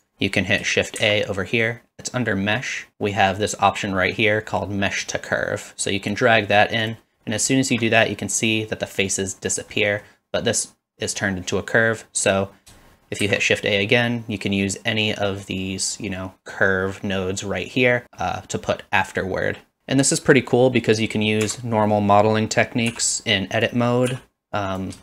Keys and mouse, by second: 0.0 click, 1.0 shift+a, 7.6 shift+middle drag, 9.8 middle drag, 13.2 shift+a, 21.5 Tab, 22.9 i, 23.6 click, 24.7 click.